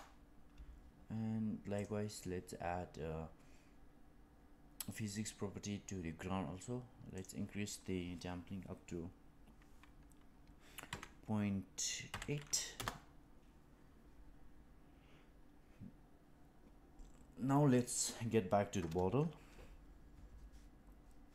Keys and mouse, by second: 5.0 click, 7.2-14.6 drag, 17.7 click.